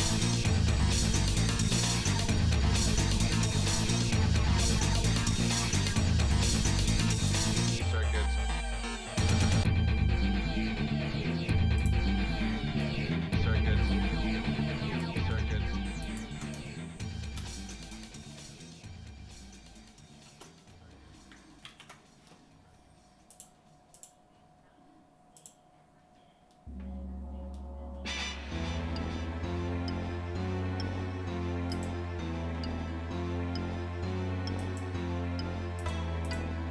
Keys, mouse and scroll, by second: 0.0-0.5 scroll down 3, 0.6 Tab, 1.2 shift+middle click, 2.4 shift+middle click, 3.4 shift+middle click, 4.8 shift+middle click, 6.3-12.1 drag, 14.9 g, 16.7 shift+middle click, 17.5 middle click, 18.0 scroll down 2, 18.3-20.4 shift+middle drag, 21.7 ctrl+s, 23.3 click, 24.1-25.7 drag, 31.7-34.9 drag, 35.9 click.